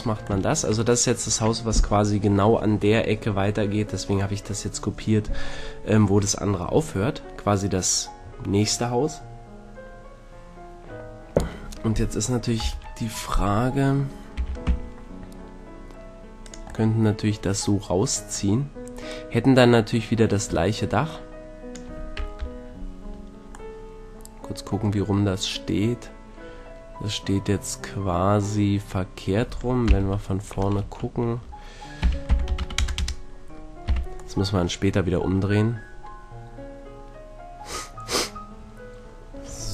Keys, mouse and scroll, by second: 12.6 KP_1, 14.3 e, 16.6-21.0 drag, 22.4 KP_1, 29.9 KP_1, 30.8 Tab, 32.0 r, 33.9 z, 36.2-36.6 middle drag.